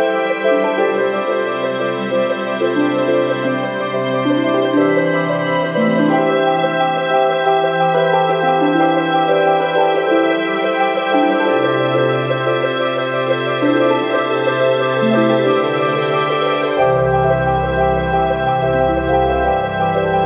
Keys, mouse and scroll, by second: 0.5 0, 1.7-2.3 scroll down 4, 2.7 click, 3.2 scroll down 2, 3.7 scroll up 1, 4.8 ctrl+click, 5.3 ctrl+click, 6.8 click, 8.7 click, 9.5 1, 9.9 2, 11.2 0, 12.9 click, 14.6 click, 15.8 click, 16.8 2, 17.3 click, 17.8 2, 18.2 click, 19.1 0, 19.5 ,, 20.1 5.